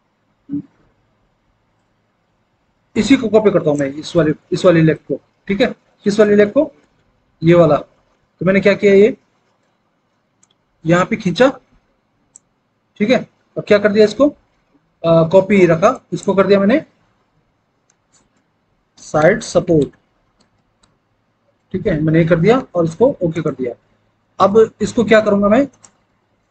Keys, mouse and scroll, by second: 17.9-21.5 typing.